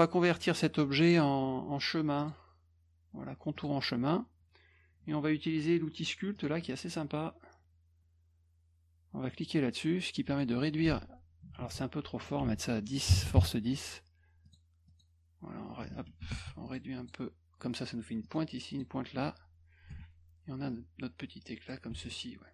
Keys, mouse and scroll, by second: 2.2 click, 3.5 click, 6.3 click, 9.3 click, 10.3 click, 11.6 ctrl+z, 12.2 click, 12.4 ctrl+a, 14.4 click, 14.9 click, 16.3 ctrl+z, 16.6 click, 17.0 click, 18.2 click, 18.7 click, 19.9 F1, 20.7 click, 21.9 F1, 22.0 click.